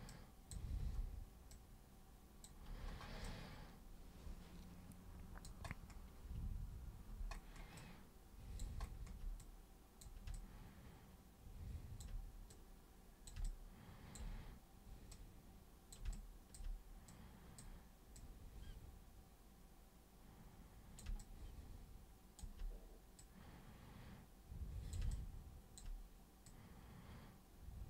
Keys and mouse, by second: 0.1-0.5 super+drag, 0.8 super+w, 1.5 super+click, 3.2-5.5 alt+super+drag, 7.8 alt+super+click, 9.4-10.0 super+drag, 10.3-12.0 alt+super+drag, 12.5 super+click, 13.5 alt+super+click, 15.1-15.9 super+drag, 16.1-16.5 alt+super+drag, 17.1 super+click, 18.1 super+click, 21.2-22.4 alt+super+drag, 23.2-24.9 super+drag, 25.1-25.8 alt+super+drag, 26.5-27.8 super+drag.